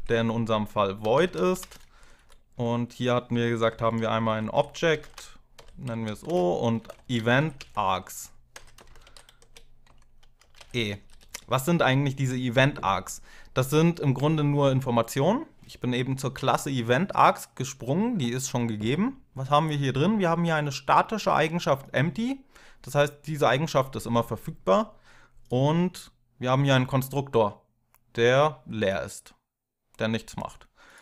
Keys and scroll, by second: 0.6-1.6 typing, 1.8 ctrl+Right, 2.0 ctrl+Right, 3.2-10.9 typing, 11.0 Left, 11.2 Left, 13.3 F12.